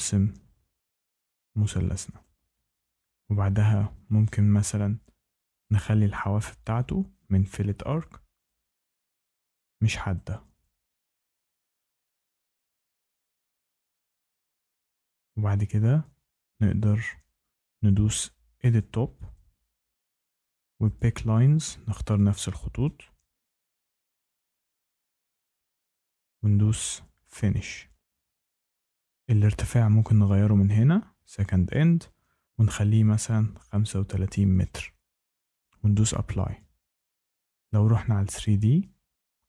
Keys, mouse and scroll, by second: 2.1 click, 6.1 click, 7.9 click, 8.4 click, 9.4 click, 10.1 click, 10.5 click, 11.5 click, 12.1 click, 12.6 click, 14.1 click, 18.7 click, 20.9 click, 21.6 click, 22.1 click, 22.8 click, 23.5 click, 24.0 click, 24.6 click, 25.3 click, 27.3 click, 28.9 click, 32.5-34.0 typing, 36.0 click, 38.4 click.